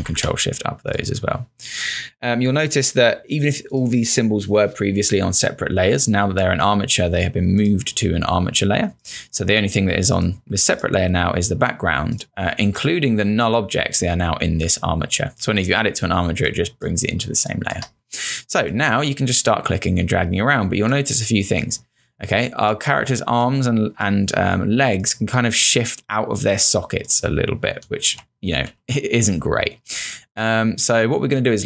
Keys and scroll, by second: 16.2 space, 28.0-30.3 typing.